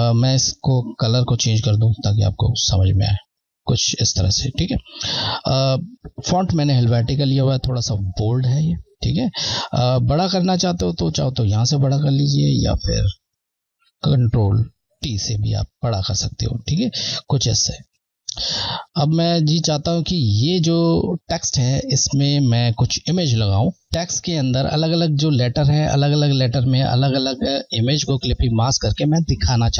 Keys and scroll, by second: 9.5 Left, 16.5 shift+Left, 18.6 Left.